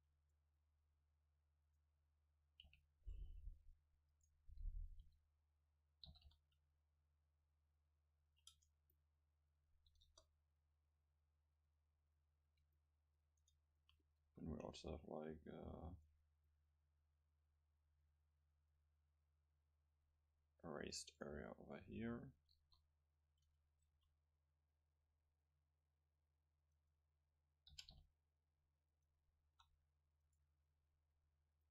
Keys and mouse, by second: 1.7-3.7 drag, 2.7 c, 4.5-6.2 drag, 6.1 g, 8.4 click, 8.5 Tab, 10.1 KP_0, 10.9-12.8 middle drag, 13.3 Tab, 14.3 a, 14.7 c, 21.2-23.1 drag, 22.6 KP_0, 23.9 e, 26.9 click, 27.7 g, 28.7 click, 29.5 alt+s, 30.4-31.7 right drag.